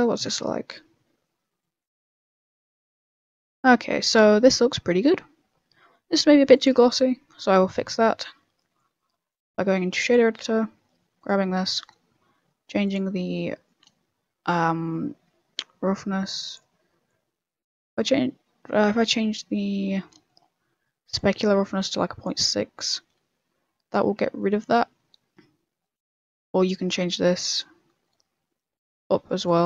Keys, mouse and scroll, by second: 1.5 click, 1.5 z, 8.7 click, 10.4 click, 10.4 n, 11.2 right click, 12.2 right click, 12.2 middle click, 12.8 click, 13.2-13.6 scroll up 4, 13.6 middle click, 15.8 click, 19.2 click, 20.0 middle click, 21.1 click, 23.5 z, 24.2 a, 24.8 z, 26.6 click.